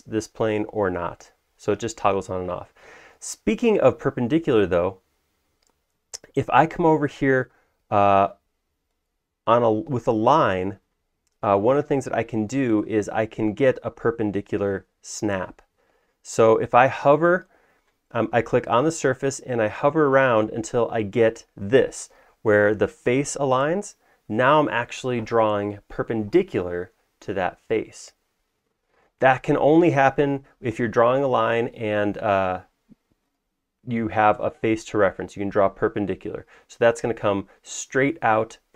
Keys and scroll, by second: 0.9 Down, 1.1 Down, 1.6 Down, 7.9 Down, 14.8 Down, 15.3 Down, 16.3 Down, 30.8 Escape.